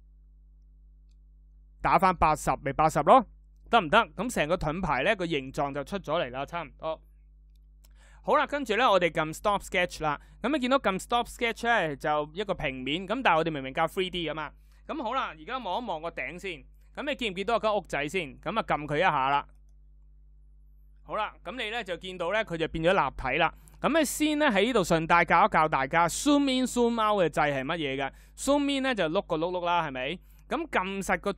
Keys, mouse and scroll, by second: 28.1-30.3 middle drag, 28.1-28.5 scroll up 2, 28.5-28.9 scroll down 2, 28.9-30.2 scroll up 2, 30.2-30.5 scroll down 2.